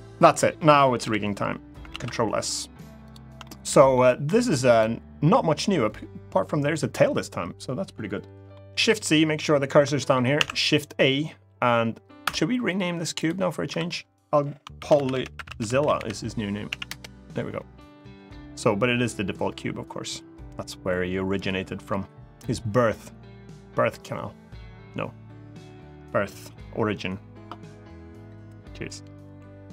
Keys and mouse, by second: 0.8 KP_1, 1.7 ctrl+s, 3.2 shift+middle click, 4.5 click, 8.5 shift+c, 9.7 shift+middle click, 10.1 shift+a, 11.9 Escape, 13.4 F2, 15.7 l, 29.4 shift+a.